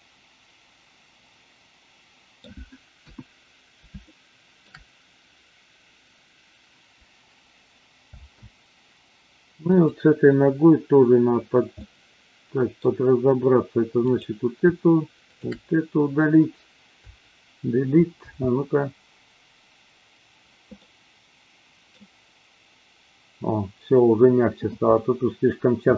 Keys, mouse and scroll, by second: 2.9 KP_1, 3.9-4.7 shift+middle drag, 8.1 space, 9.7 click, 11.7-12.8 middle drag, 13.9 click, 15.3 shift+click, 16.9 Delete, 18.2 space, 20.7-21.8 middle drag.